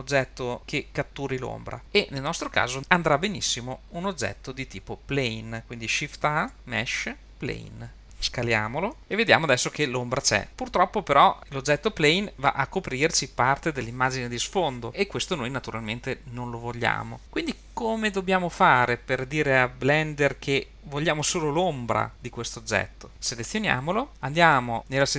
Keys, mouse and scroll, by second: 6.5 shift+a, 9.8 s, 23.4 click.